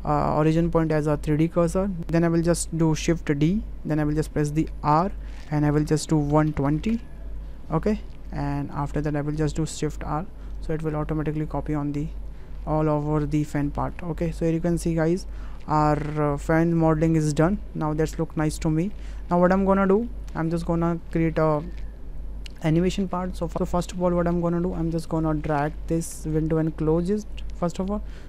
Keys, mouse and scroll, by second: 3.5 shift+d, 6.9 KP_Decimal, 10.0 shift+r, 13.8 click, 14.4-14.8 middle drag, 15.1-16.1 middle drag, 16.9-18.7 middle drag, 18.9 shift+middle click, 19.6 shift+middle drag, 20.1 middle click, 21.4 shift+middle click, 26.3-27.3 drag.